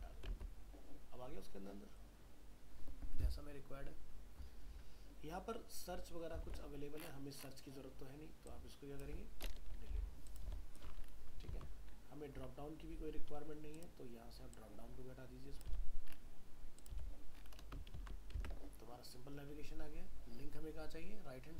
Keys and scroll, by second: 0.3 alt+Tab, 6.5 alt+Tab, 11.5 ctrl+s, 18.0 ctrl+s, 18.4 alt+Tab.